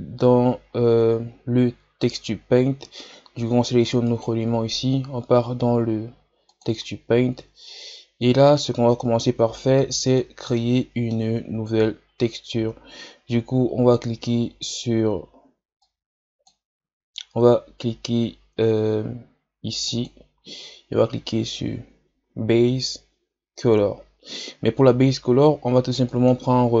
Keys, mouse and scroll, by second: 0.0 scroll up 3, 0.7-1.4 scroll down 3, 4.1 right click, 6.9 click, 7.7-8.0 scroll down 5, 9.7 click, 10.6-11.6 middle drag, 11.6-12.0 shift+scroll down 3, 12.1-12.8 scroll up 2, 12.8 ctrl+scroll up 1, 15.9-26.8 drag.